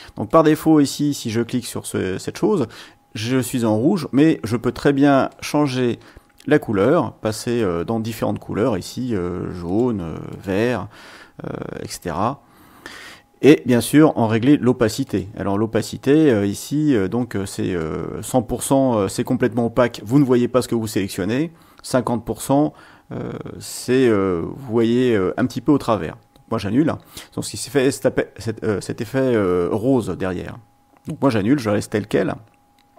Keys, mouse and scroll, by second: 0.2 click, 5.3 click, 9.6 click, 10.3 click, 15.0 click, 17.8-25.0 drag, 31.0 click.